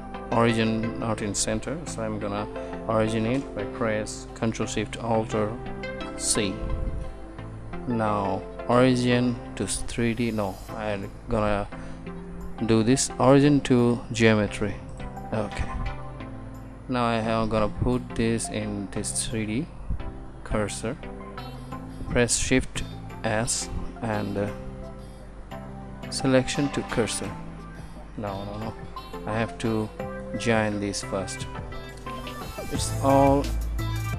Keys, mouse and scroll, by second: 23.0 shift+s, 28.5 ctrl+z.